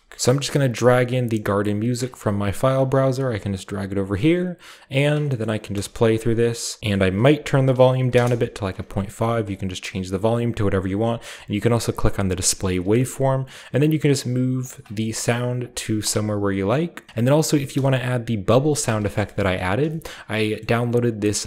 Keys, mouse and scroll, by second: 0.1 ctrl+w, 2.2-4.1 scroll down 1, 3.2 g, 5.6 space, 6.0 middle click, 6.2-6.9 scroll up 1, 6.9 click, 7.1 click, 7.9 _, 8.0 ., 8.3 Return, 8.3 5, 10.0-10.8 drag, 12.1 click, 12.6 scroll down 1, 13.0 g, 13.2 click, 14.0 g, 14.7 click, 15.6 click, 15.8-16.3 scroll down 1, 16.0-17.1 drag, 16.3-17.4 scroll up 1, 17.7 space, 18.1 click, 18.1 middle click, 18.1-18.7 scroll down 1, 18.2 click, 19.1 ctrl+middle click, 20.1 ctrl+middle click, 20.6-21.4 middle drag.